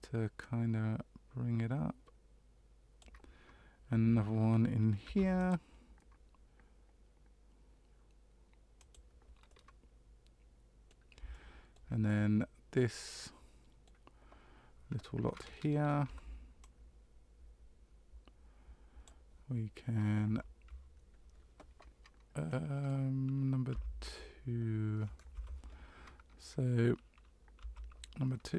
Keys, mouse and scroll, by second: 0.4 click, 5.0 ctrl+r, 9.5 middle click, 11.3 shift+middle click, 12.0 middle click, 16.0 c, 27.6 2.